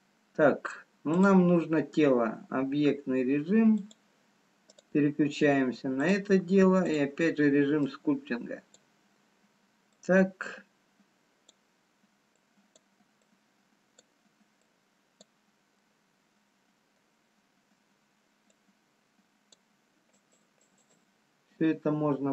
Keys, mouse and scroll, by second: 1.0 click, 5.6 click, 6.0 click, 12.5 click, 13.3 click, 15.0 click, 16.0 middle click, 18.9 click, 18.9 scroll down 2, 20.1 shift+click, 21.6 shift+click.